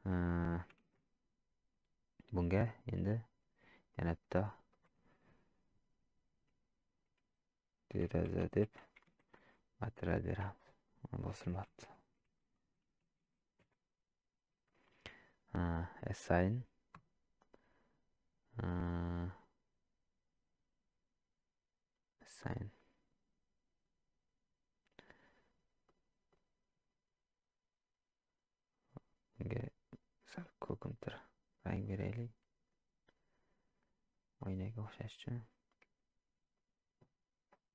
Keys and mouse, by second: 0.9 shift+z, 3.9 click, 4.7 click, 8.0 e, 9.0 a, 10.9-14.5 drag, 17.1-26.5 drag, 29.3 click, 34.4 middle click.